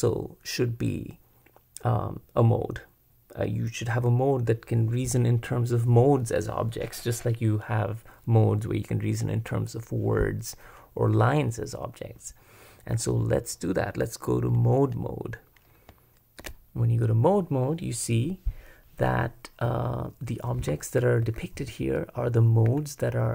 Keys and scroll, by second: 16.4 super+Escape, 21.2 j, 21.6 k, 22.7 j.